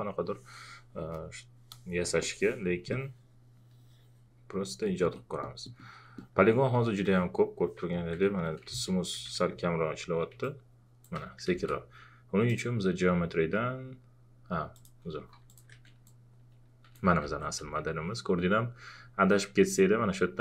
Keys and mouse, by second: 7.8 ctrl+a, 7.9 ctrl+click, 8.7 shift+f, 10.4 shift+click, 11.5 ctrl+z, 12.5 click, 14.7 click, 16.0 shift+click, 17.2 ctrl+z, 17.6 x.